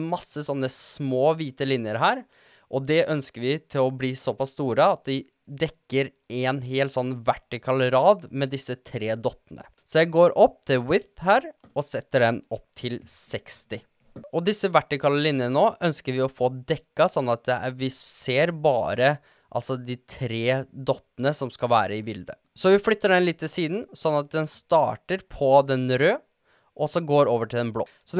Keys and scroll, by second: 11.7-12.7 typing, 14.0 typing, 22.4 shift+Tab, 22.7 shift+Tab, 23.2 shift+Tab.